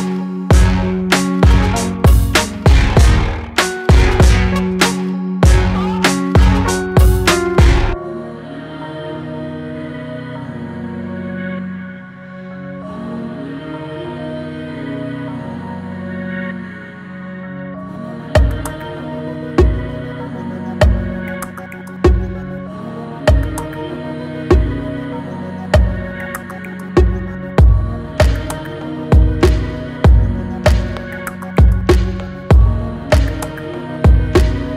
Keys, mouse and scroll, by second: 1.3 Tab, 1.7 Tab, 2.0-3.0 right drag, 3.0-4.0 scroll down 10, 4.0 click, 5.8-6.3 drag, 6.8 scroll up 2, 7.3-7.8 middle drag, 7.8 Tab, 12.1 ctrl+r, 14.0 ctrl+r, 22.4 alt+shift+click, 23.1 alt+shift+click, 23.8 alt+shift+click, 24.5 alt+shift+click, 25.2 alt+shift+click, 25.8 alt+shift+click, 26.4 alt+shift+click, 27.5 s, 32.1 alt+click, 33.0 alt+shift+click, 34.1 alt+shift+click.